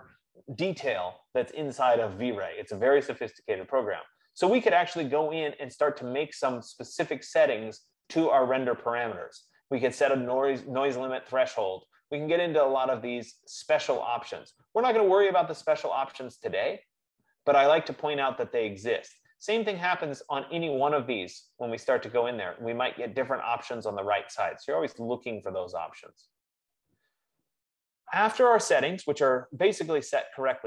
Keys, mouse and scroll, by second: 20.4-25.4 drag.